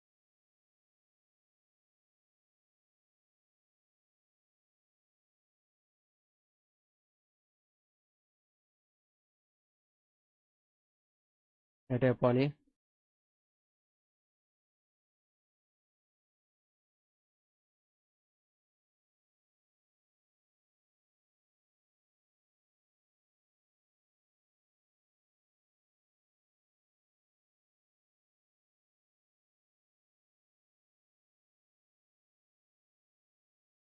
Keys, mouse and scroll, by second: 1.7 click, 2.3 alt+middle click, 3.1 click, 4.7 click, 8.3 click, 10.0 click, 11.0 click, 11.7 e, 12.4 click, 13.7 click, 14.5 alt+middle click, 16.0 alt+middle click, 16.8 alt+middle click, 17.3 alt+click, 18.6 alt+middle click, 19.5-20.6 drag, 21.1 middle click, 21.7 click, 22.3 alt+middle click, 22.9 scroll up 2, 23.2 click, 24.3 ctrl+z, 24.8 alt+click, 25.7-26.7 drag, 27.0 alt+middle click, 28.3 click, 29.4-30.9 drag, 31.1 middle click, 32.0 middle click, 32.5 alt+click, 33.2 click.